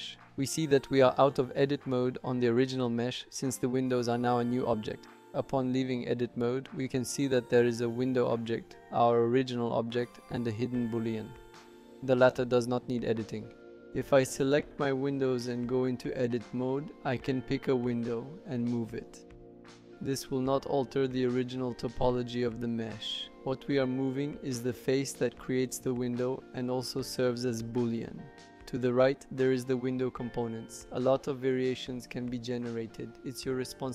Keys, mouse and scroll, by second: 6.6 click, 9.7 click, 12.9 click, 15.0 click, 17.2 click, 17.6 Tab, 18.1 click, 18.8 alt+e, 19.2 Tab, 20.5 Tab, 21.0 click, 28.8 click.